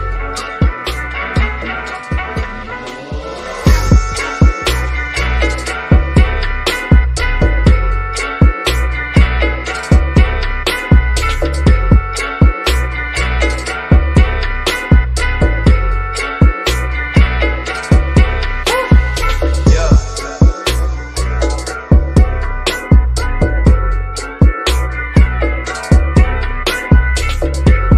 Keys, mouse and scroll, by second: 0.0 ctrl+t, 1.5 click, 2.9 1, 5.2 click, 6.0-6.4 scroll up 1, 6.6 middle click, 7.1-7.6 scroll up 1, 8.8 click, 13.6 click, 16.3-17.0 scroll down 1, 17.4 click, 19.4-20.6 scroll down 1, 20.6 shift+scroll down 2, 20.6 shift+middle click, 21.6-24.3 shift+middle drag, 24.3-26.5 drag.